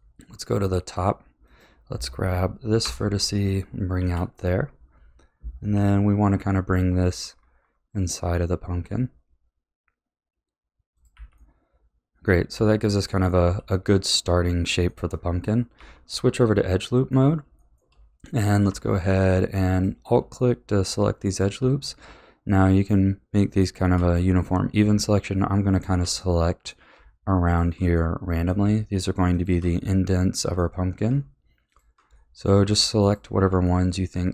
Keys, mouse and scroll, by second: 1.4 click, 2.8 ctrl+KP_Add, 3.9 KP_1, 5.7 g, 11.1 a, 11.4-12.5 middle drag, 12.5 a, 12.8-13.4 middle drag, 13.4 a, 13.8-14.1 scroll down 3, 14.1-15.1 middle drag, 15.1-15.7 scroll up 3, 15.7 2, 16.4-19.7 middle drag, 19.7 alt+click, 20.4-23.3 middle drag, 23.5 alt+shift+click, 24.1-25.7 middle drag, 25.7 alt+shift+click, 26.2-27.4 middle drag, 27.4 alt+shift+click, 27.9-29.3 middle drag, 29.3 alt+shift+click, 29.8-31.7 middle drag, 31.7 alt+shift+click, 32.2-33.0 middle drag, 33.0 alt+shift+click, 33.6-34.3 middle drag.